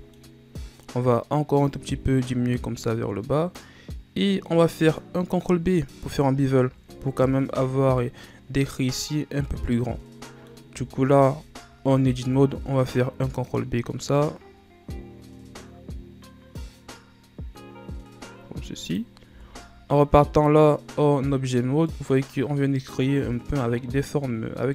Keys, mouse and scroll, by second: 1.9-4.2 drag, 4.2 scroll down 2, 4.4-6.0 middle drag, 6.0-7.1 scroll up 1, 7.1-7.6 ctrl+scroll down 2, 7.6 Tab, 8.2-10.9 middle drag, 10.9 Tab, 12.4 ctrl+b, 19.4 Tab, 20.1-21.5 middle drag, 21.5-22.0 ctrl+scroll down 2, 22.0-24.7 middle drag.